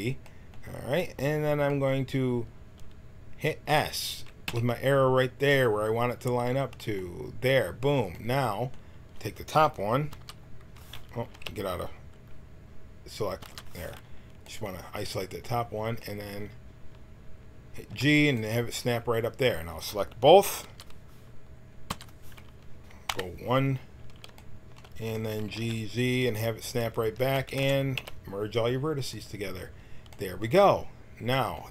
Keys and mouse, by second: 4.4 s, 10.1 l, 11.3 a, 17.9 g, 20.6 l, 21.8 l, 23.0 KP_1, 25.4 g, 27.0 a, 27.2 a, 27.4 w, 27.9 a.